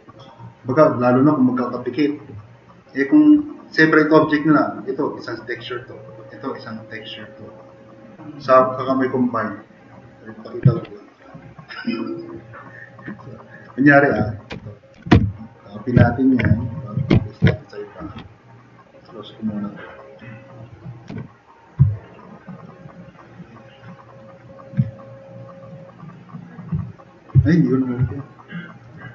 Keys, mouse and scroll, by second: 6.6 click, 11.6 drag, 12.7 click, 13.5 click, 14.6 ctrl+c, 15.0 ctrl+c, 15.2 ctrl+c, 16.0 ctrl+n, 17.4 ctrl+v, 21.1 s, 21.9 drag, 22.6 drag, 23.5 click, 24.4 drag, 24.8 s, 27.5-27.8 drag.